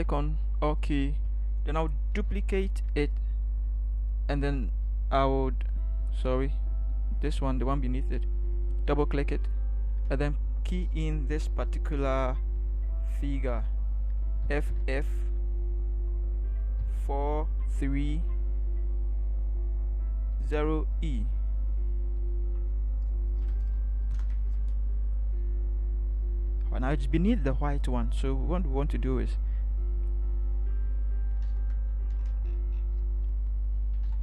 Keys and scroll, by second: 2.1 ctrl+j, 14.5 f, 14.8 f, 16.7 4, 17.6 3, 20.6 0, 21.2 e, 28.1 ctrl+t, 31.4 ctrl+=, 34.0 ctrl+=.